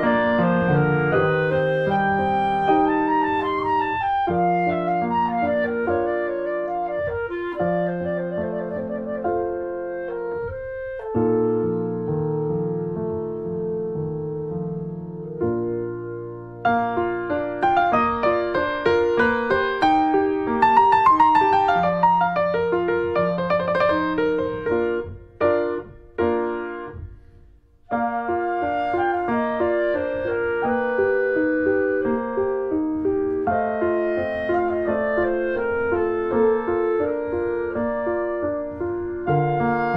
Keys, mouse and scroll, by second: 0.5 ctrl+s, 0.7 scroll down 2, 0.7 middle click, 0.8-1.3 scroll up 2, 1.1 middle click, 1.3 middle click, 2.2 click, 2.4 shift+middle click, 2.8 click, 3.7 shift+middle click, 4.0 scroll up 1, 4.2 click, 4.7 shift+middle click, 5.1 click, 5.4 shift+middle click, 5.8 ctrl+z, 5.9 click, 6.3 shift+middle click, 6.8 click, 7.1 shift+middle click, 7.3 click, 8.0 scroll down 2, 8.0 shift+middle click, 8.6 click, 9.2 shift+middle click, 9.4 click, 9.8 shift+middle click, 10.2-11.8 drag, 11.8 scroll down 2, 11.9-13.1 shift+middle drag, 13.1 click, 13.2 scroll up 1, 13.3 shift+middle click, 13.4 click, 14.1 shift+middle click, 14.3 shift+click, 14.5 shift+middle click, 15.0-16.7 drag, 16.7 ctrl+z, 16.9 shift+click, 17.0 scroll down 1, 17.1 shift+middle click, 17.5 scroll up 2, 17.6 shift+middle click, 17.9 shift+click, 18.7 scroll down 1, 18.8 middle click, 19.2 click, 20.0 scroll down 1, 20.1 shift+middle click, 20.2 scroll up 1, 20.4 click, 21.2 shift+middle click, 21.5-22.9 drag, 22.9 scroll up 1, 23.0 shift+middle click, 23.4 click, 23.8 ctrl+z, 24.5 click, 24.9 ctrl+z, 25.3 click, 26.1 shift+middle click, 26.4-27.9 drag, 27.9 shift+middle click, 28.6-30.8 drag, 30.8 shift+middle click, 31.5 click, 31.6 scroll down 1, 31.8 click, 32.0 shift+middle click, 32.2 click, 32.7 shift+middle click, 32.9 scroll down 2, 33.1-34.3 drag, 34.5 click, 35.1 click, 35.5-36.1 scroll up 2, 35.7 click, 36.1 shift+middle click, 36.3-37.4 drag, 37.4 shift+middle click, 37.8-39.2 drag, 39.2 shift+middle click, 39.7 click, 39.8 shift+middle click, 39.9 shift+scroll up 1.